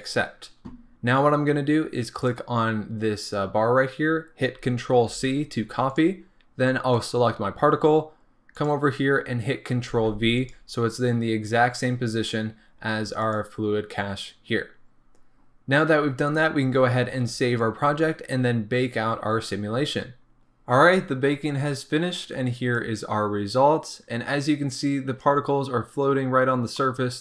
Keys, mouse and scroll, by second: 0.0-7.0 drag, 10.4-13.3 drag, 22.9-26.8 drag, 26.8-27.2 middle drag.